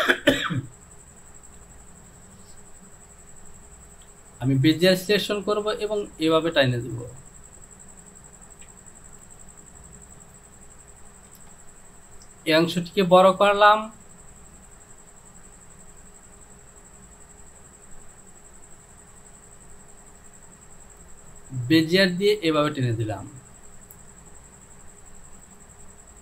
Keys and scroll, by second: 11.5 Return.